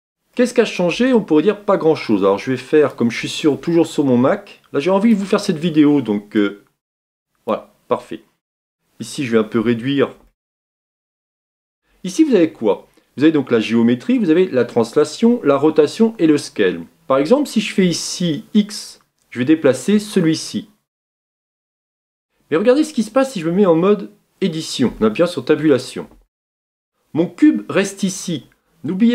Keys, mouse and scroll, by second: 0.3-3.0 middle drag, 3.0-22.2 drag, 26.1 Tab.